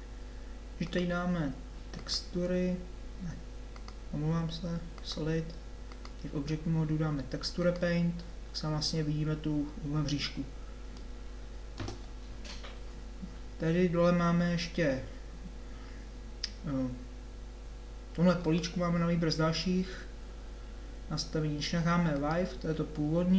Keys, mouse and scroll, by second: 0.8-2.7 drag, 3.7 click.